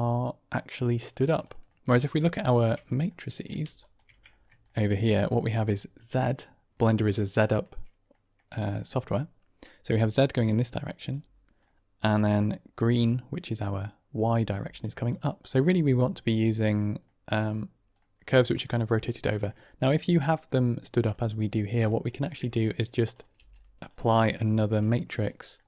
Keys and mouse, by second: 1.4 shift+drag, 2.3 ctrl+click, 3.1 shift+drag, 3.8 ctrl+right click, 4.2-4.9 shift+middle drag, 5.1 middle click, 5.6 shift+middle drag, 7.5-8.0 middle drag, 8.2 middle click, 9.7-10.5 d, 9.9-11.0 drag, 11.1 d, 11.7 middle click, 14.5-15.3 d, 14.7-16.0 drag, 15.9 d, 16.0 d, 16.2 ctrl+z, 16.2 click, 17.1 middle click, 19.0-19.3 shift+middle drag, 21.2 middle click, 22.0 ctrl+shift+click, 22.6-23.1 drag, 23.3 g, 24.1 middle click, 24.9-25.4 shift+middle drag.